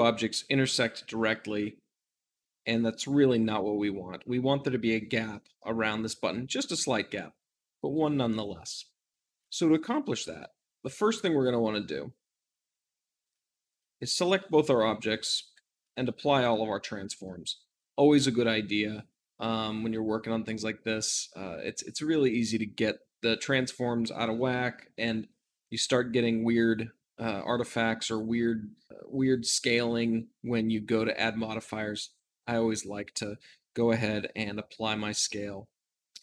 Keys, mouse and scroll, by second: 10.7 `, 12.0 z, 13.1 click, 13.6 shift+click, 15.3 ctrl+a, 16.2-36.2 drag.